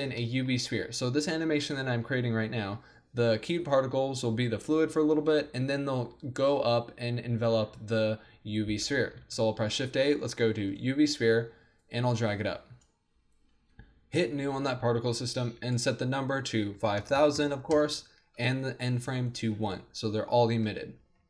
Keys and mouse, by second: 1.2 click, 9.2 shift+a, 10.7 middle click, 11.9 click, 17.2 KP_0.